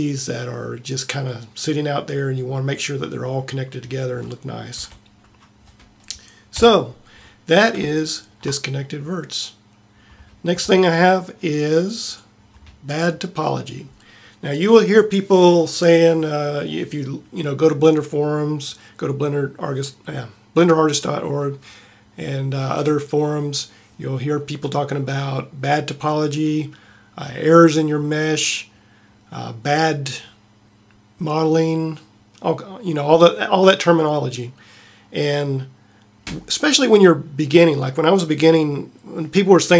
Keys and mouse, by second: 3.3-4.0 middle drag, 4.9 a, 6.5 KP_7.